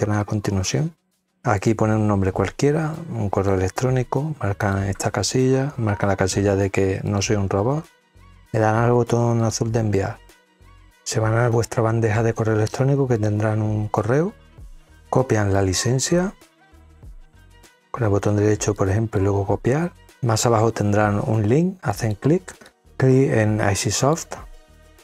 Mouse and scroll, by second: 1.5 click, 2.9 click, 4.6 click, 6.2 middle click, 6.3 scroll up 2, 7.0 click, 9.4 click, 13.1 click, 15.5-16.9 drag, 17.1 right click, 18.7 click, 21.9 click, 24.0 click.